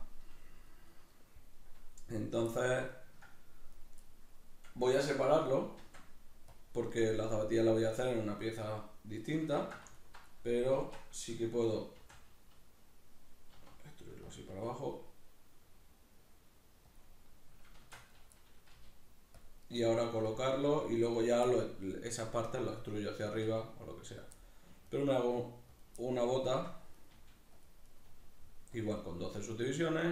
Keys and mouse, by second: 3.7 right click, 4.1-17.0 middle drag, 5.8 shift+d, 6.6 click, 9.6 ctrl+z, 10.0 alt+right click, 10.8 shift+Tab, 12.0 shift+d, 14.4 click, 14.5 s, 17.0 click, 17.8 shift+Tab, 18.0 right click, 18.8 g, 19.4 click, 19.6 right click, 19.8 g, 20.3 click, 20.5 right click, 20.6 g, 21.2 click, 22.8 middle click, 23.2 right click, 23.4 g, 24.2 click, 24.4 middle click, 24.8 right click, 25.0 g, 25.8 click, 26.0-27.0 middle drag, 27.0 right click, 27.1 g, 27.6 click, 27.8 right click, 28.0 g, 28.9 click, 29.1 middle click, 29.5 right click, 29.8 g.